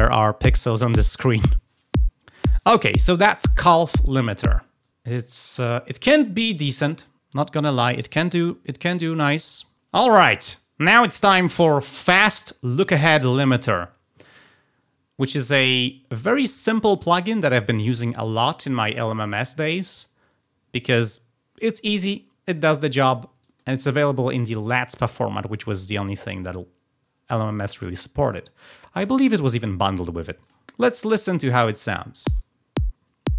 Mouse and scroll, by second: 5.5 click, 6.3 click, 7.8 click, 9.0 click, 9.7 click, 23.3 click, 30.3 click.